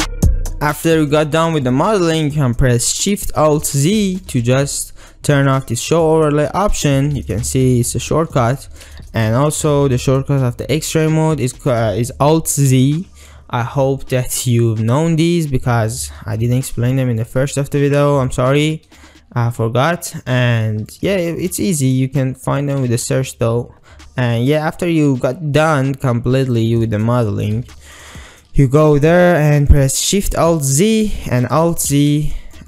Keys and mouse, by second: 0.0-0.2 typing, 0.4 shift+middle click, 0.8 ctrl+middle click, 1.7 shift+middle click, 3.6 alt+shift+z, 4.0 shift+click, 7.2 alt+shift+z, 8.0 alt+shift+z, 8.5 alt+shift+z, 9.6 alt+shift+z, 12.8 alt+z, 13.4-14.4 ctrl+drag, 16.1 alt+shift+z, 16.9 shift+middle click, 18.3 shift+middle click, 18.7 ctrl+middle click, 20.1 shift+middle click, 21.0 ctrl+middle click, 21.3-21.6 shift+middle drag, 22.0 click, 22.6 shift+click, 23.0 alt+z, 24.0 s, 25.7 r, 26.9 ctrl+drag, 27.3 shift+middle click, 30.8 alt+shift+z, 31.8 alt+z, 32.4 shift+middle click.